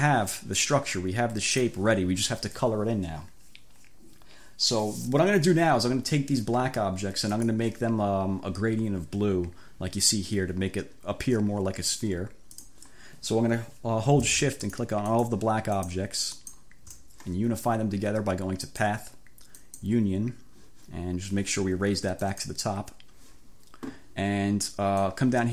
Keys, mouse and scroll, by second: 0.0 click, 1.6 click, 7.4 click, 12.6 click, 14.8 shift+click, 15.2 shift+click, 15.8 shift+click, 16.4 shift+click, 18.7 click, 19.7 click, 22.2 click, 25.1-25.5 drag.